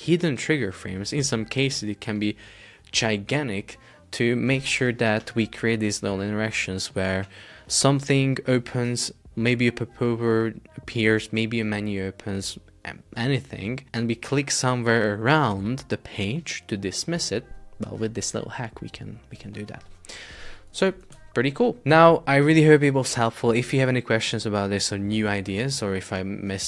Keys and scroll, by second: 21.2 super+Tab, 21.9 super+Tab.